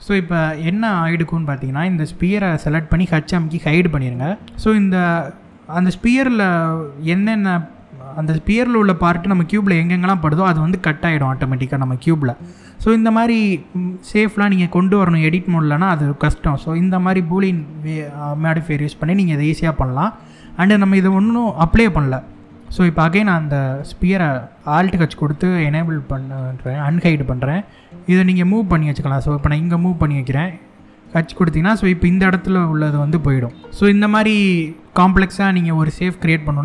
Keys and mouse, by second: 0.2 middle click, 2.2 click, 3.2 h, 4.4-5.1 middle drag, 12.3-12.6 middle drag, 14.8 middle click, 24.7 alt+h, 26.1-26.5 middle drag, 27.3 g, 29.6 click, 30.7 h, 31.9-32.6 middle drag, 33.2-33.6 middle drag.